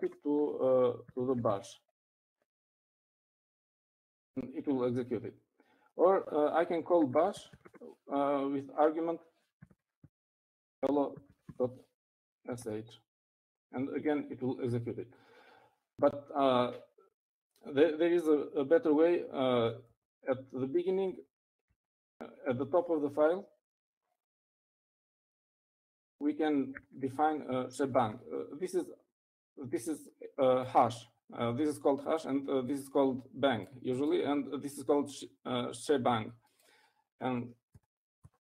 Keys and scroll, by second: 0.0 shift+|, 1.2-3.7 typing, 8.1-9.5 typing, 10.6-13.7 typing, 21.0 Up, 21.2 Up, 22.8 Up, 25.8 o, 27.0 shift+3, 28.0 shift+1.